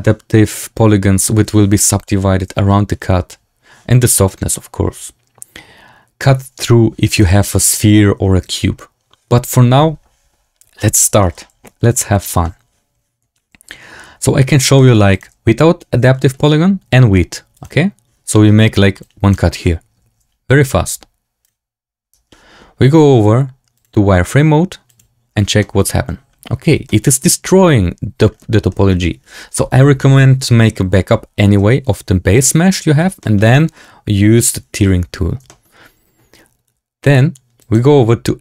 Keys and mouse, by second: 7.1 middle drag, 11.8-12.3 middle drag, 14.7 middle drag, 15.0-15.4 drag, 16.1 shift+middle drag, 17.7 click, 18.2 middle click, 18.9 click, 21.3 click, 23.7-25.4 drag, 25.5 shift+middle drag, 26.8 shift+click, 28.6 shift+drag, 33.1 shift+drag, 35.4 shift+drag, 37.5 click.